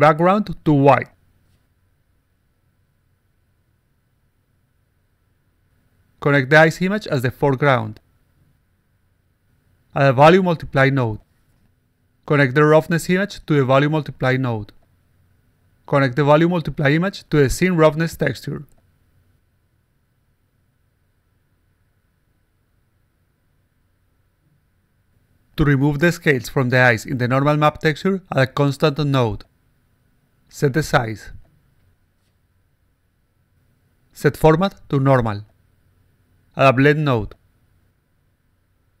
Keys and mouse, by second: 0.0 click, 1.3 click, 2.3 1, 4.4 click, 5.5 click, 6.7 click, 7.7 click, 9.1 click, 10.5 click, 11.8 click, 13.5 click, 15.4-16.7 drag, 17.2-18.6 drag, 18.8 click, 20.6-21.2 alt+drag, 20.6-21.2 alt+right drag, 21.5-22.4 alt+drag, 21.5-22.4 alt+right drag, 22.5 click, 22.8 click, 23.2 click, 23.7 click, 24.3 click, 24.5 click, 24.8 click, 25.2 click, 25.4 click, 25.8 click, 26.2 alt+click, 26.6 click, 26.7 click, 27.8 click, 28.7 click, 30.6 click, 31.0-33.2 typing, 33.5 right click, 33.9 click, 35.4 click, 36.7 click, 37.2-38.8 drag.